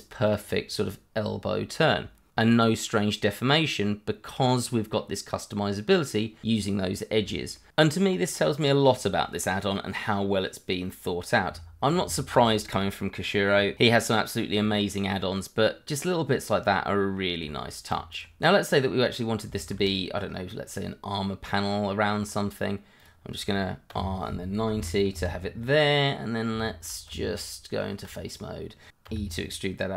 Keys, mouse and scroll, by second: 0.2 click, 1.8 scroll up 1, 3.9-4.5 scroll up 1, 4.5 middle click, 6.7-7.4 scroll down 1, 7.7 shift+middle click, 7.8 middle click, 7.9 shift+middle click, 8.1 shift+scroll up 2, 10.8 scroll down 1, 11.2 middle click, 13.0-13.3 scroll up 1, 13.3 shift+middle click, 15.4 middle click, 16.6 scroll down 1, 16.9 middle click, 17.4 Tab, 18.1 click, 18.4 middle click, 19.5 shift+middle click, 19.6 middle click, 23.0 click, 23.9 r, 24.7 KP_9, 25.1 Return, 25.8 middle click, 26.8 shift+middle click, 27.1 Tab, 28.3 click, 29.0 e.